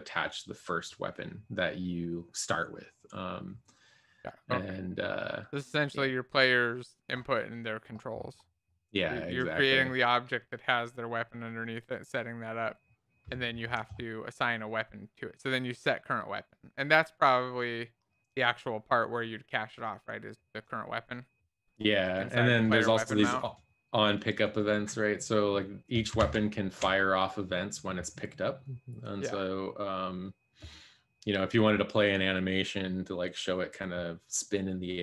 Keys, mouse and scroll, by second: 23.3-25.4 drag, 28.3-29.9 drag.